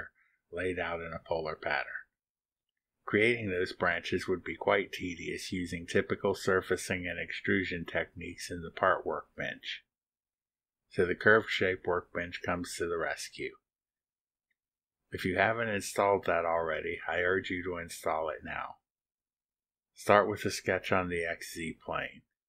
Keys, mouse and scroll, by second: 15.6 click, 20.5 click, 21.7 click, 22.2 click.